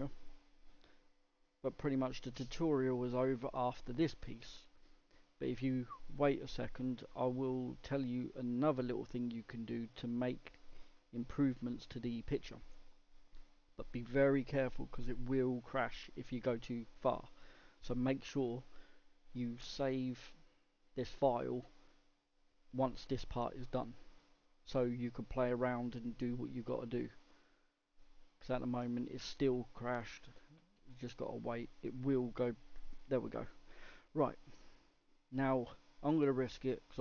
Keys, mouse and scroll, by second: 32.4 click, 34.4-37.0 middle drag.